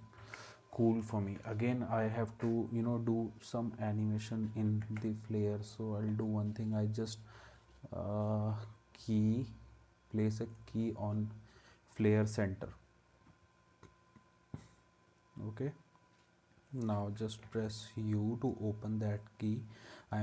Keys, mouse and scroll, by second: 0.2 ctrl+s, 4.8 ctrl+s, 17.4 u.